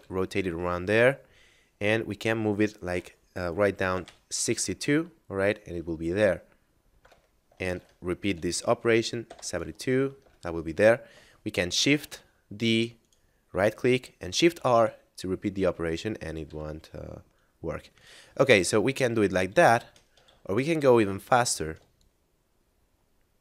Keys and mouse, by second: 6.9 Return, 7.7 shift+d, 8.2 r, 9.1 7, 10.2 Return, 11.7 shift+d, 12.9 right click, 14.3 shift+r, 16.4 r, 17.9 right click, 18.1 ctrl+z, 18.5 ctrl+z, 18.8 ctrl+z, 19.3 ctrl+z, 20.3 ctrl+z, 20.7 a, 21.9 ctrl+click.